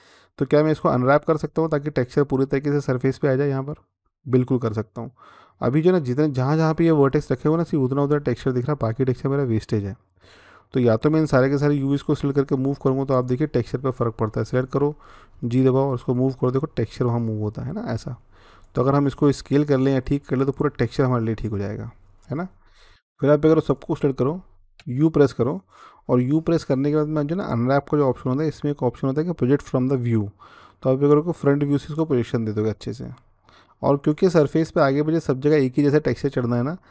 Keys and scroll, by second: 15.1 g, 24.6 u.